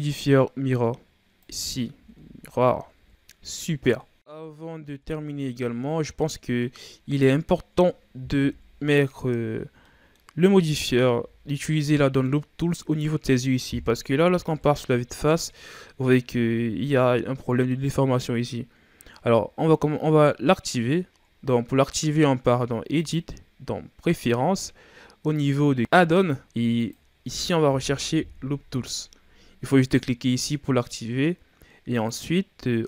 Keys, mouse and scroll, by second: 1.4 click, 1.8 a, 2.1-2.8 scroll down 4, 2.8 KP_1, 3.1-3.8 scroll up 3, 3.8 scroll up 1, 3.9 middle click, 4.3 scroll down 6, 4.3 middle click, 4.7 Tab, 5.1-5.5 scroll down 3, 5.5-6.5 scroll up 8, 6.5 scroll up 1, 6.5-8.2 middle drag, 8.2 KP_1, 9.4-9.8 scroll down 5, 9.8-10.2 middle drag, 10.2-10.6 scroll up 5, 10.6 right click, 11.0 Tab, 11.4 scroll down 4, 11.6 middle click, 12.4-13.6 scroll up 1, 13.6 KP_1, 14.2 Tab, 14.6-15.3 scroll down 6, 15.8 scroll down 1, 16.1 a, 19.5-20.7 shift+scroll up 2, 20.8-22.9 ctrl+scroll down 2, 22.9-25.8 drag.